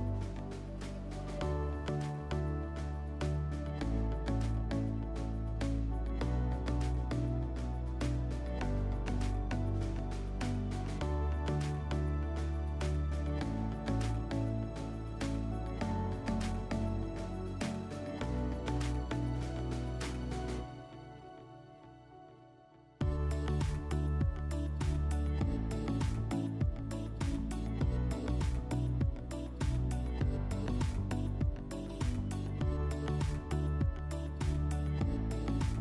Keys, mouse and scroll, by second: 0.5 click, 4.0 click, 4.9 click, 5.5 click, 6.3 scroll, 7.7 middle click, 8.2 click, 12.1 shift+click, 14.1 click, 15.9-17.1 drag, 17.2 click, 17.7 middle click, 19.7 g, 20.3 g, 21.6 click, 22.7 click, 23.6 click, 25.8 click, 27.0 click, 28.7 click, 29.8 ctrl+click, 30.4 click, 33.4 click, 35.2 click.